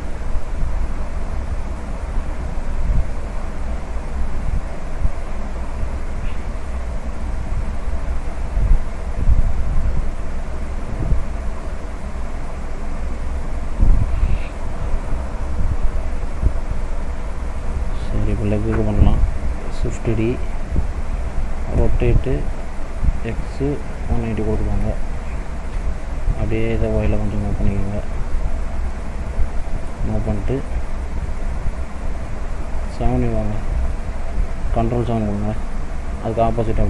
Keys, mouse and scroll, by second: 0.1 click, 1.7 click, 2.9 shift+click, 4.1 s, 6.7 click, 8.2 click, 11.1 click, 12.2 click, 13.6 middle click, 14.2-14.6 scroll down 2, 14.6 middle click, 16.9 click, 17.4 middle click, 18.2 click, 18.8 middle click, 20.0 shift+d, 27.5 click, 29.3 middle click, 30.4 middle click, 31.4 click, 32.9 KP_7, 35.6 ctrl+KP_7.